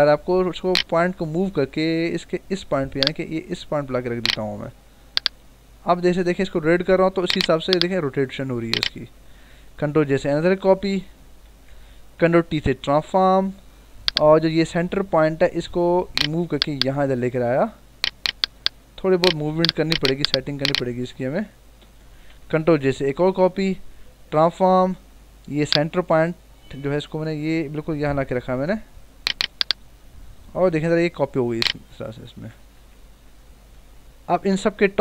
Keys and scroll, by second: 1.7 ctrl+=, 4.6 ctrl+-, 8.9 Return, 10.1 ctrl+j, 11.1 ctrl+=, 12.7 ctrl+t, 21.0 Up, 21.7 Return, 23.0 ctrl+j, 23.8 ctrl+t, 32.3 Return, 33.7 ctrl+-.